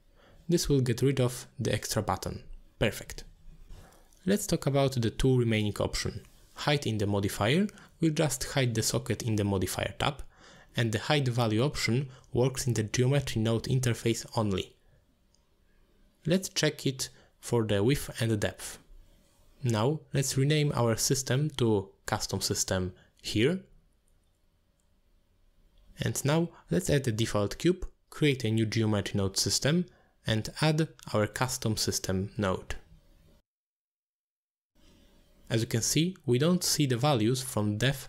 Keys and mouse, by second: 6.9 click, 7.5 click, 8.0 click, 8.5 click, 8.9 click, 9.2 click, 10.4 click, 13.9 middle click, 14.3 shift+middle drag, 14.4 x, 15.3 click, 22.2-24.4 drag, 24.4 shift+middle click, 24.7-26.3 drag, 27.8 click, 28.4 shift+middle click, 28.7 shift+a, 30.1 g, 31.0 middle drag, 31.7 shift+middle drag, 33.2 click, 35.2 shift+a.